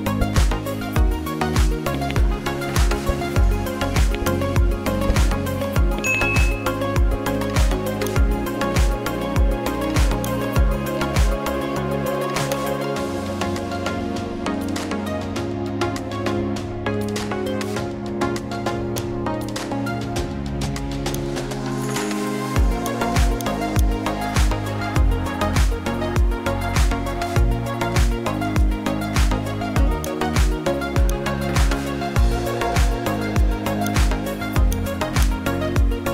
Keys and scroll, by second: 7.4 ctrl+z.